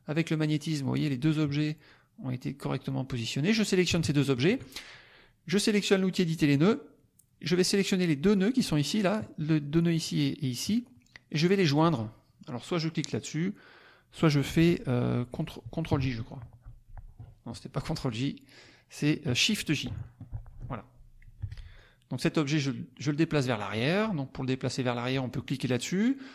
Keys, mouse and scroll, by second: 1.8 click, 4.0 shift+click, 6.5 click, 7.6-8.7 drag, 16.6 ctrl+j, 18.0 click, 20.2 shift+j, 21.4 F1, 21.7-23.5 drag.